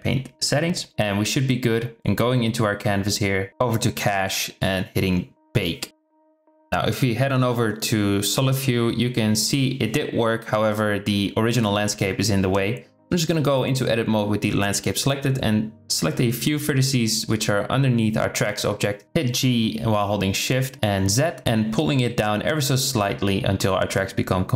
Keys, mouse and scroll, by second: 0.2 click, 1.3 click, 2.0 KP_0, 3.9 click, 5.5-6.4 drag, 6.7 z, 11.4 Tab, 12.5 click, 13.1 shift+middle click, 14.4 shift+click, 14.8 middle click, 16.3 middle click, 18.5 KP_0, 19.4 g, 21.9 Tab, 22.1-22.6 drag.